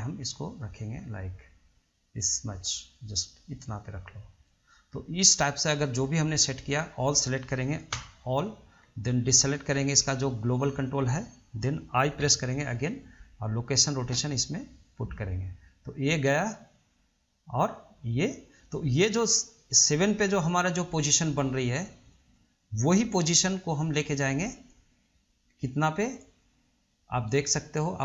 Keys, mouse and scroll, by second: 6.6-8.1 scroll down 2, 8.1 a, 9.3 ctrl+click, 9.9-12.4 middle drag, 12.4 i, 15.1-18.1 drag.